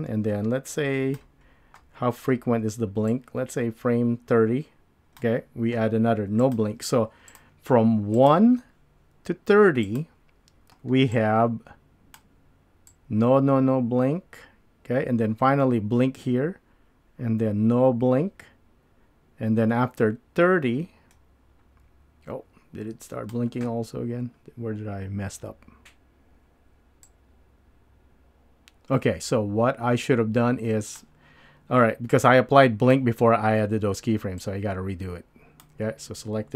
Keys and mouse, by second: 0.5-1.2 drag, 3.1-5.2 drag, 6.4 click, 7.3 click, 8.2 click, 9.9 click, 11.1 click, 11.3 click, 12.9-23.3 drag, 27.1-31.0 drag, 32.1-32.9 drag, 34.5-35.6 drag.